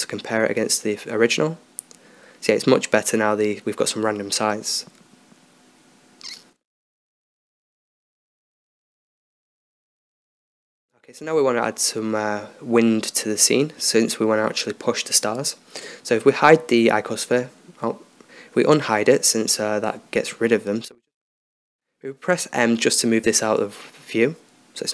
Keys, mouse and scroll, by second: 2.3 1, 3.5 2, 6.0-7.9 middle drag, 7.2 Escape, 8.8 KP_0, 14.8-15.8 middle drag, 15.8-19.1 right drag, 16.6 h, 19.1 alt+h, 19.9-24.0 right drag, 22.2 m.